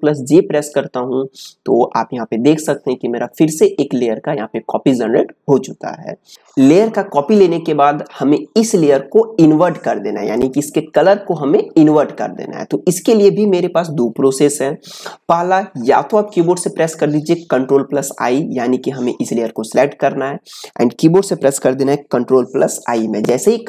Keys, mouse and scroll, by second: 19.4 click, 22.1 click, 23.4 ctrl+i.